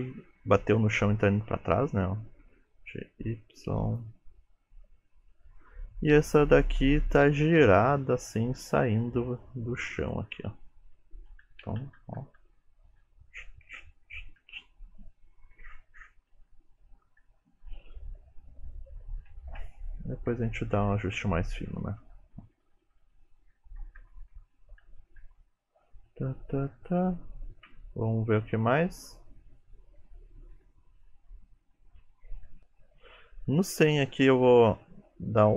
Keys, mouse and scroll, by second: 0.0 Right, 0.3 Right, 0.8 Right, 1.0 Right, 2.5 g, 6.3 click, 7.7 r, 8.6 g, 11.5-11.9 Left, 12.1 Left, 12.3 Left, 12.4 Left, 13.1 Right, 13.4 Right, 13.7 Right, 14.1 Right, 14.5 Right, 15.6 Left, 15.8 Left, 16.4 Left, 17.3 Right, 19.5-19.8 Left, 20.1 Left, 20.4 Right, 20.6 Right, 20.8 Right, 21.0 Right, 21.2 Right, 21.4 Right, 21.8 Right, 22.3 Left, 22.5 Left, 22.7 Left, 23.1 Left, 23.5 Right, 23.7 Right, 23.9 Right, 24.1 Right, 24.3 Right, 24.7 Left, 24.9 Left, 25.1 Left, 25.3 Left, 25.5 Left, 25.9 Right, 26.1 Right, 26.3 Right, 26.5 Right, 26.8 Right, 27.8 Right, 28.1 Right, 28.4 Right, 28.9 Right, 30.0 Left, 30.2 Right, 30.4 Left, 30.6 Right, 30.9 Right, 31.1 Right, 32.4 Left, 33.9 click.